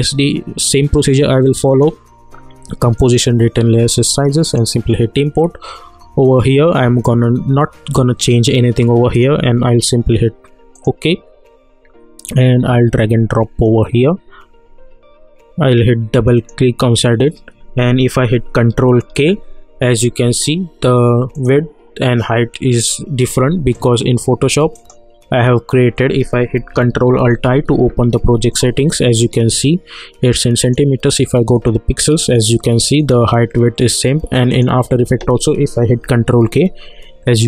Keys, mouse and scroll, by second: 1.6 click, 9.1-16.0 drag, 16.1 click, 19.0 ctrl+k, 21.3 click, 23.7 click, 27.4 ctrl+alt+i, 30.6 click, 36.0 ctrl+k.